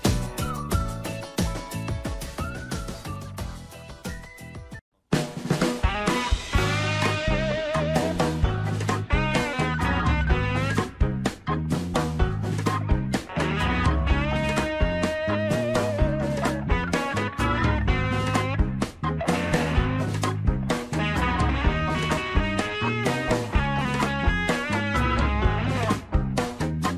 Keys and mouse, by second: 1.6 ctrl+b, 4.4 click, 5.2-10.2 drag, 11.9 Tab, 12.3 shift+middle click, 13.3 click, 13.7 shift+middle click, 14.2 click, 14.5 shift+middle click, 14.8 middle click, 15.5 click, 15.8 Tab, 16.4 shift+middle click, 17.6 ctrl+r, 19.9 Tab, 20.7 shift+middle click, 21.2 Tab, 21.8 shift+middle click, 23.2 ctrl+r, 26.7 shift+middle click.